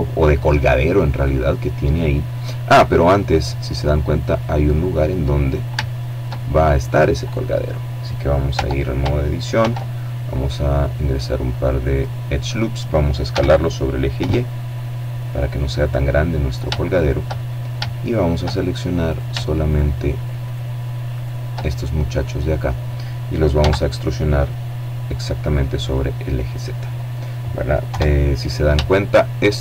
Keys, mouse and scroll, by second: 1.0 middle click, 1.9-2.4 scroll down 1, 2.4 middle click, 4.1 shift+right click, 4.6 shift+click, 4.7 shift+middle click, 5.1 shift+click, 5.5 shift+middle click, 5.7-6.8 shift+scroll up 3, 7.1 Tab, 8.3 ctrl+r, 9.3-9.8 scroll up 2, 10.6 click, 11.9 s, 12.8 y, 14.3 click, 15.5 shift+middle click, 16.1-16.6 shift+scroll up 1, 16.6 shift+middle click, 17.7 shift+right click, 18.3 shift+right click, 19.1 right click, 19.7 right click, 20.5-21.8 middle drag, 22.2 e, 25.4 click, 26.5 KP_7, 27.4-28.4 shift+middle drag.